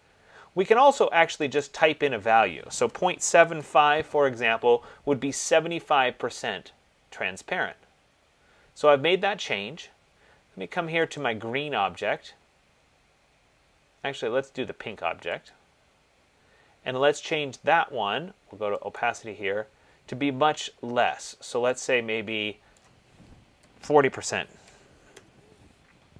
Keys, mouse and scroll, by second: 0.3 click, 2.0 click, 3.0 BackSpace, 3.7 BackSpace, 11.4 click, 15.7 click, 19.2 click, 23.3 click, 23.7-24.8 typing, 25.3 Tab.